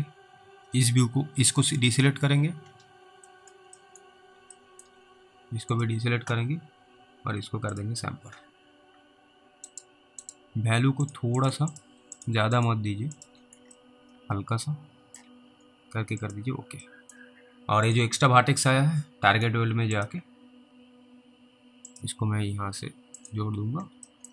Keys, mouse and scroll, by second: 1.7 alt+click, 2.8-3.3 scroll down 2, 3.6 middle click, 4.1 middle click, 4.9 alt+middle click, 5.0 scroll up 1, 5.8 alt+click, 9.8 right click, 11.1 click, 11.4 double click, 11.7 ctrl+click, 12.2 ctrl+double click, 12.6 ctrl+click, 14.1 alt+middle click, 16.3 click, 17.4 scroll up 1, 17.6 middle click, 17.9 click, 23.6-23.9 scroll down 1.